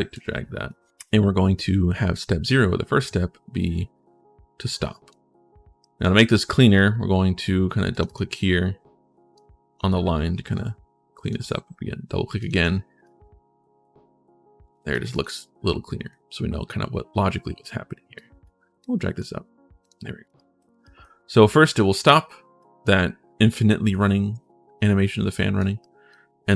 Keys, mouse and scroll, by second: 0.4 click, 1.0 right click, 2.2-4.9 drag, 5.6 right click, 7.7 click, 7.7 right click, 9.1-11.0 right drag, 12.2 right click, 12.8-14.7 right drag, 14.9 right click, 15.4 right click, 17.9 click, 18.6 click, 19.6 click, 20.1 right click, 20.6 right click, 22.3 right click, 25.1 right click, 25.6 right click.